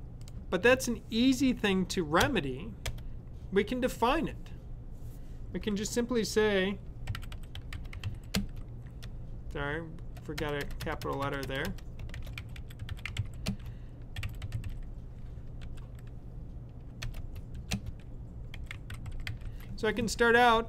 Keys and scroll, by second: 6.7-8.5 typing, 10.3-15.5 typing, 16.8-19.9 typing.